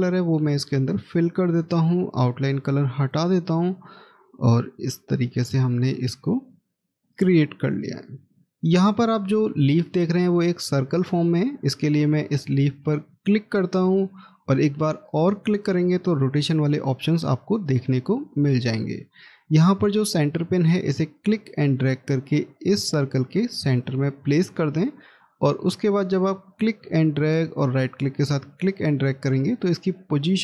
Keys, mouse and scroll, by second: 2.8 right click, 7.0-8.3 scroll up 1, 30.2 right click.